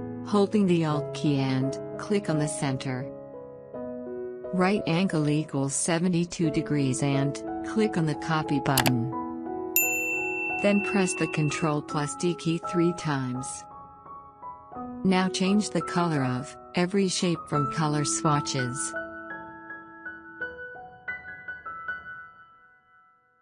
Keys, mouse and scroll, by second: 11.3 ctrl+d, 12.8 ctrl+d, 13.7 ctrl+d, 14.4 click, 16.3 click.